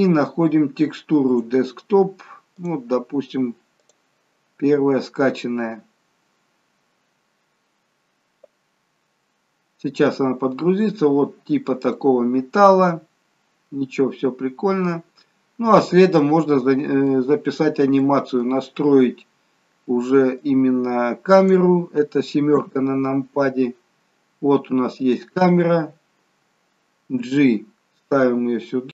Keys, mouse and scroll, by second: 11.0-11.6 scroll up 4, 11.6-12.1 scroll down 2, 12.1 middle click, 15.6-16.4 scroll down 5, 16.5 middle click, 17.7-19.4 scroll up 3, 18.2 middle click, 20.6 click, 22.8 KP_7, 24.1-25.2 scroll down 8, 25.2 click, 27.4 g.